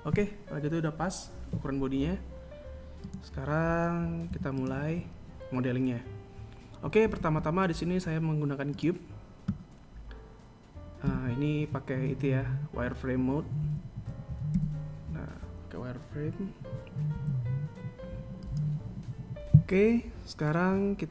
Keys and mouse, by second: 0.4 KP_1, 3.9 right click, 5.1 x, 7.9 shift+a, 11.9 z, 14.5 KP_1, 15.4 z, 18.0 s.